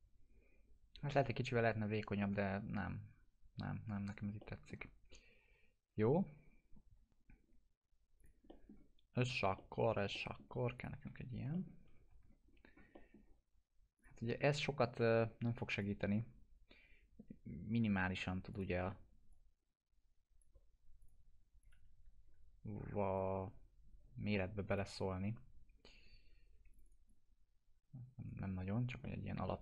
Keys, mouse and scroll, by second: 2.2-2.8 alt+middle drag, 6.7-7.2 scroll up 2, 8.2 click, 8.5 middle click, 8.7 scroll down 1, 9.6-10.5 alt+middle click, 10.8 click, 11.1 alt+q, 11.6 alt+middle click, 11.9-13.0 typing, 12.5-13.0 scroll up 2, 13.0 middle click, 14.0 click, 14.6 scroll up 1, 15.0 middle click, 15.8-18.0 drag, 18.8 w, 19.3-20.6 drag, 21.9 t, 23.0-28.3 drag, 28.6 scroll down 1, 29.1 alt+middle click, 29.5 middle click.